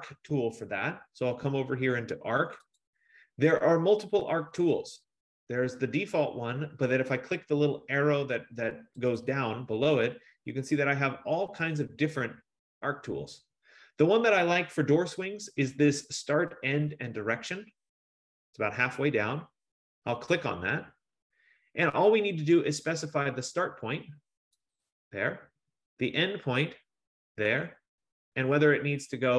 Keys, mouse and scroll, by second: 2.8 click, 4.8 click, 9.4 click, 18.3 F15, 20.4 click, 23.1 middle click, 24.8 click, 27.8 click, 28.5 scroll.